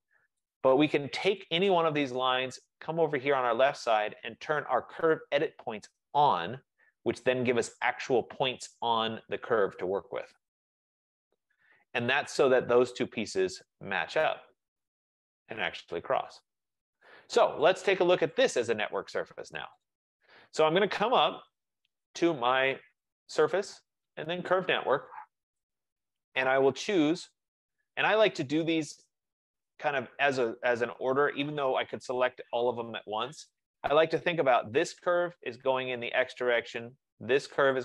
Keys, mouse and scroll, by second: 0.7 click, 1.8 click, 6.5 click, 7.2 F15, 11.8 middle click, 17.7 right click, 18.5 click, 19.9 click, 21.3 Escape, 21.5 Escape, 23.4 click, 25.7 click, 34.3 click.